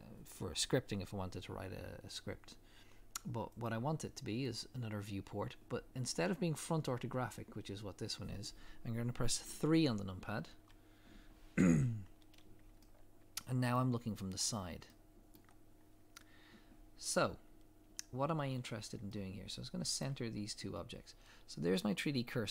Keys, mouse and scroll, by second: 4.6 click, 10.5 KP_3, 12.9 shift+middle click, 14.3 scroll up 1, 14.9 shift+middle click, 15.8 scroll down 1, 17.5 scroll up 1, 18.7 scroll up 1, 19.2 shift+middle click, 20.3 shift+middle click.